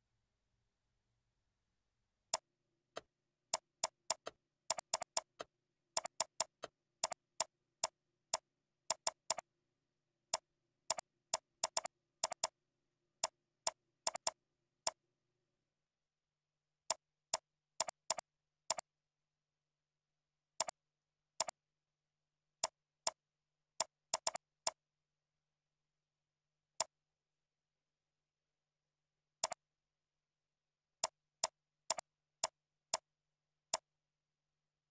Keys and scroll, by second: 8.8 ctrl+c, 9.8 ctrl+v, 12.1 ctrl+c, 12.6 ctrl+v, 14.0 ctrl+c, 14.4 ctrl+v, 16.3 ctrl+b, 29.1 ctrl+r, 31.3 ctrl+c, 31.5 ctrl+v, 32.3 ctrl+c, 32.5 ctrl+v, 33.5 ctrl+r.